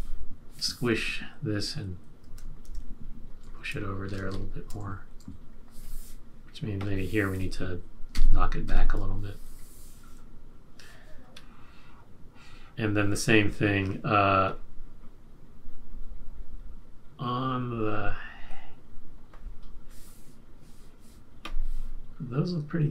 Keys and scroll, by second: 3.4 shift+Right, 4.0 Left, 4.8 Right, 5.1 Right, 8.1 shift+Left.